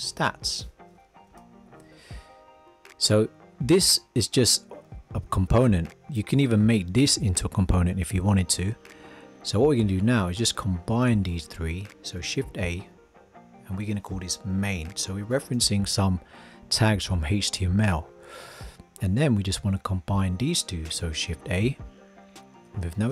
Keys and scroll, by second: 12.4 shift+a, 21.3 shift+a.